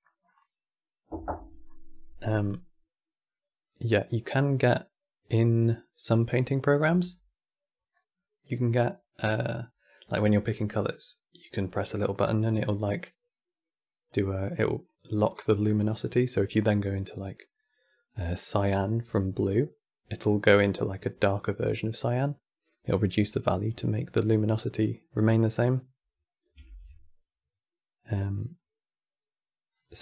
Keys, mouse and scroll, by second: 3.0-6.0 middle drag, 23.5 click, 24.2-26.3 middle drag, 26.3 shift+a.